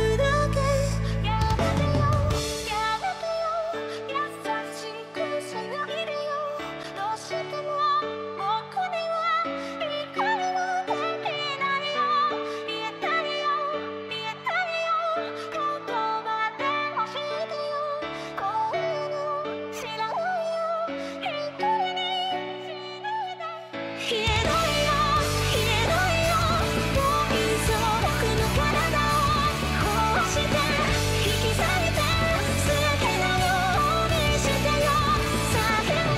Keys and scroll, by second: 0.2 ctrl+z, 0.4 ctrl+z, 9.9 ctrl+z, 10.4 ctrl+z, 10.8 ctrl+z, 10.9 ctrl+z, 11.0 ctrl+z, 11.7 ctrl+z, 12.1 ctrl+z, 12.8 ctrl+z, 13.8 ctrl+z, 31.4 ctrl+z, 31.6 ctrl+z, 31.8 ctrl+z, 31.8 ctrl+z, 32.0 ctrl+z, 32.3 ctrl+z, 32.4 ctrl+z, 32.7 ctrl+z, 32.8 ctrl+z, 33.1 ctrl+z, 33.3 ctrl+z, 33.4 ctrl+z, 35.9 ctrl+z.